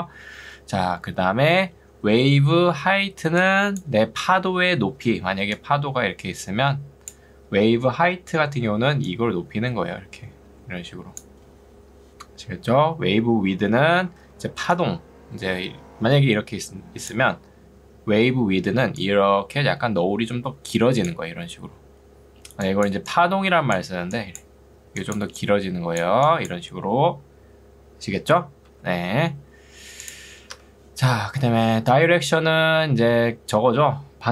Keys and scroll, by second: 2.6 ctrl+2, 4.2 Escape, 5.0 ctrl+2, 11.8 Escape, 14.2 ctrl+2, 28.8 ctrl+z, 30.6 Escape.